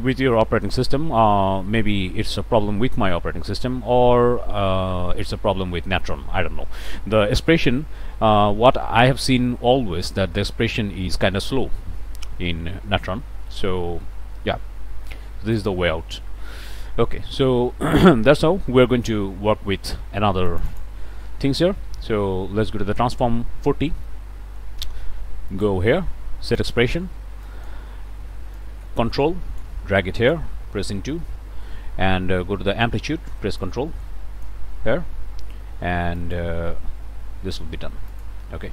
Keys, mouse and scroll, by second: 15.5 click, 18.3 click, 18.7-19.1 scroll down 1, 19.1-21.0 drag, 23.9-25.8 drag, 26.5 click, 27.4 click, 28.6-29.8 ctrl+drag, 30.2 click, 31.2 *, 33.6-34.6 ctrl+drag, 36.2 click, 36.7 BackSpace, 38.1 click.